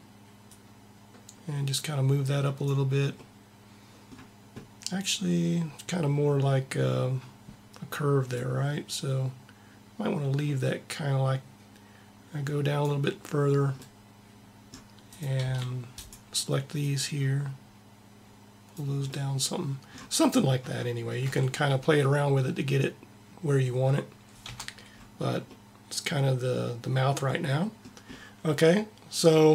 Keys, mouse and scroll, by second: 0.4-2.1 drag, 2.2 click, 3.1 middle click, 13.8-15.1 middle drag, 15.1 click, 15.3 c, 16.8 click, 21.0-22.6 middle drag, 21.2 a, 24.4 Tab, 28.1-29.5 middle drag.